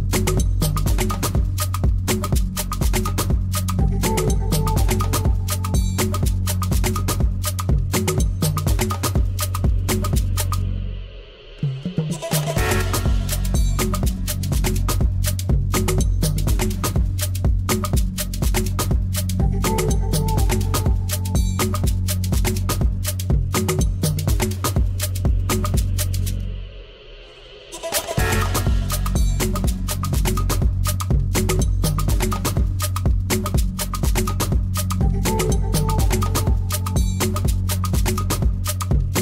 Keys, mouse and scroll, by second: 2.7 click, 3.3 click, 3.9 click, 4.4 click, 4.9 click, 5.5 click, 6.1 click, 6.7 click, 7.2 click, 7.8 click, 8.3 z, 8.5-9.0 scroll down 6, 9.0 middle click, 9.4 Tab, 9.7 scroll down 1, 9.8-12.5 middle drag, 12.6 scroll up 1, 12.8 middle drag, 15.1 click, 17.5 click, 20.6-22.1 drag, 22.9 middle click, 23.8 shift+middle click, 26.7-28.9 typing, 33.3 click, 36.6-39.1 drag.